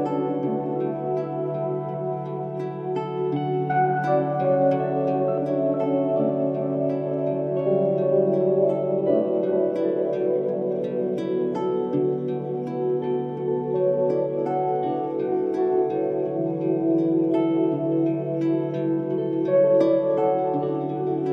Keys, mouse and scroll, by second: 5.0 6, 5.2 ., 5.5 2, 5.5 5, 5.9 Return, 10.6 2, 10.8 0, 10.9 ., 11.2 5, 11.4 Return, 16.3 click, 17.4 2, 17.6 Return, 18.8 Escape.